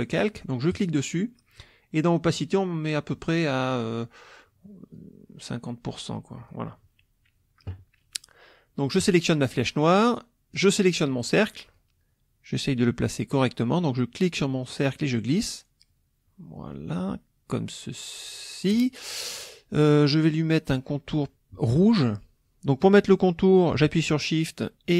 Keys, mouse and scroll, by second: 0.7 click, 2.4 click, 5.0-6.7 drag, 9.0 click, 10.6 click, 11.8-18.9 drag.